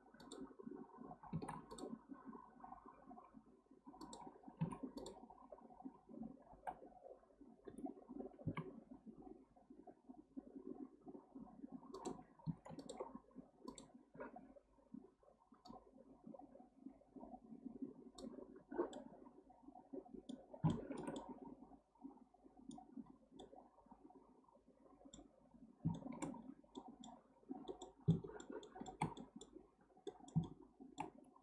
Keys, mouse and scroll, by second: 1.3 ctrl+r, 5.0 click, 5.5-6.5 scroll down 1, 6.5 g, 12.8 alt+click, 13.7 click, 15.6-18.7 drag, 18.9-20.4 middle drag, 20.4 scroll down 1, 20.7-23.0 shift+middle drag, 23.0-23.4 scroll up 1, 23.4-25.3 middle drag, 25.3 scroll down 1, 25.9-26.4 shift+middle drag, 26.4-26.8 scroll up 2, 26.8-29.6 middle drag, 29.6-30.1 scroll up 1, 30.1-31.4 middle drag.